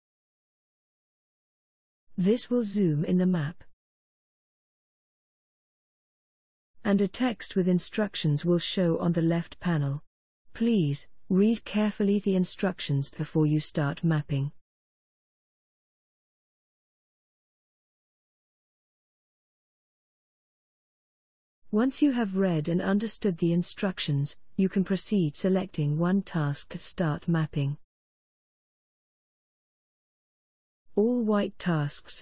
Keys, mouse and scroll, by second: 8.7-17.3 scroll down 23, 17.3 scroll up 1, 17.4-19.7 scroll down 6, 30.5 click.